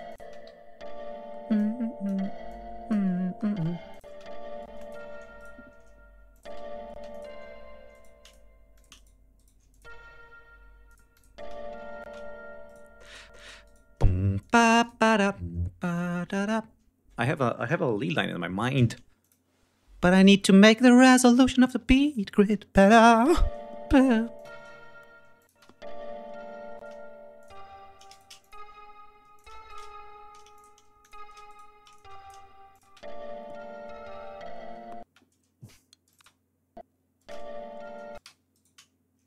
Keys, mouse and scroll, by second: 0.0 click, 1.5 click, 2.4 click, 3.3 ctrl+scroll up 2, 3.6 space, 3.8 ctrl+click, 4.4 d, 4.6 space, 4.7 ctrl+click, 5.3 ctrl+shift+right click, 6.2 click, 6.4 space, 7.0 click, 7.8 shift+right click, 8.1 shift+click, 8.7 shift+click, 9.1 shift+right click, 9.5 shift+right click, 9.8 shift+click, 11.0 click, 11.6 space, 12.2 space, 12.8 shift+right click, 13.2 shift+right click, 14.2 shift+click, 15.1 y, 19.0 click, 20.8 click, 21.8 click, 23.1 space, 23.8 space, 24.2 click, 25.2 click, 25.4 space, 26.7 space, 27.2 click, 28.2 shift+click, 29.2 shift+click, 30.4 shift+click, 30.8 shift+click, 31.3 shift+right click, 31.8 shift+click, 32.5 shift+scroll up 1, 32.7 space, 34.8 space, 35.9 click, 35.9 space, 37.2 space, 38.1 space, 38.5 shift+right click.